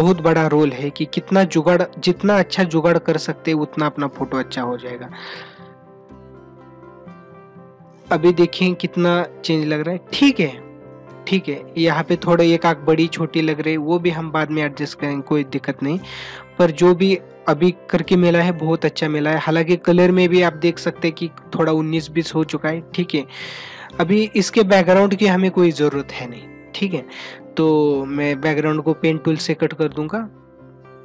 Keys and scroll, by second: 19.6 ctrl+=, 28.7 ctrl+=.